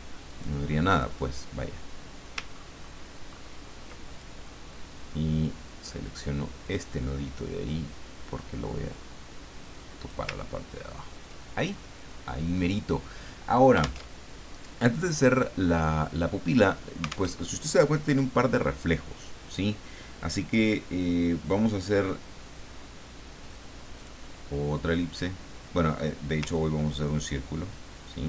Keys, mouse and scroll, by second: 0.3 click, 0.9 click, 2.5-3.0 ctrl+scroll up 2, 3.3-3.7 ctrl+scroll up 2, 4.1 ctrl+click, 6.0 click, 6.6-10.1 drag, 10.5-11.0 ctrl+scroll down 4, 12.5 click, 14.1 alt+Tab, 17.3 alt+Tab, 24.0 click, 26.5-28.2 ctrl+drag.